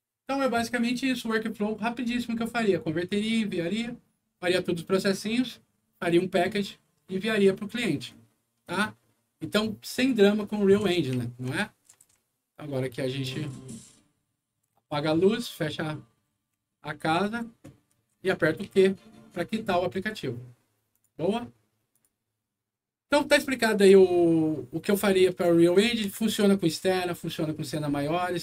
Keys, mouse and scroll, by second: 8.0-10.1 right drag, 10.6-11.6 typing, 14.9 s, 15.4 a, 16.2 f, 17.4 w, 18.6 q, 20.8 click, 21.8 click, 23.3-26.7 right drag, 25.2-26.5 typing.